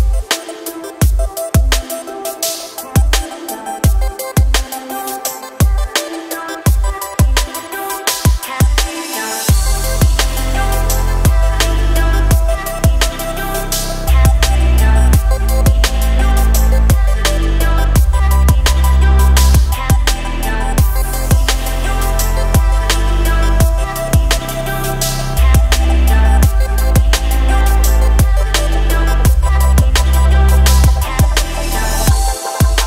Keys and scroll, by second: 1.1 s, 28.0 Delete, 30.0 KP_1.